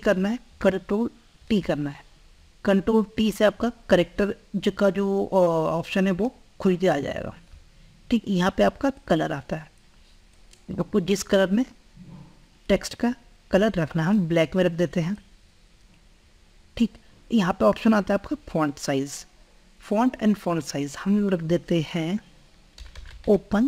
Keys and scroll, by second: 0.2 ctrl+a, 0.8 ctrl+t.